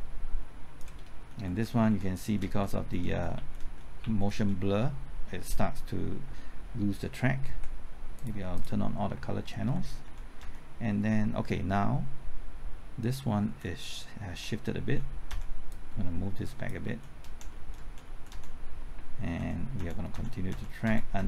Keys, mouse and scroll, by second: 1.4-3.0 typing, 3.3 Left, 3.6 Right, 4.0 Left, 4.3 Right, 6.0-6.7 typing, 8.1 click, 9.1-10.4 typing, 9.6 alt+Right, 13.4 Left, 14.3-15.3 typing, 15.7 click, 16.8-19.4 typing, 19.7 alt+Right, 20.1 alt+Right, 20.5 alt+Right, 20.8 alt+Right.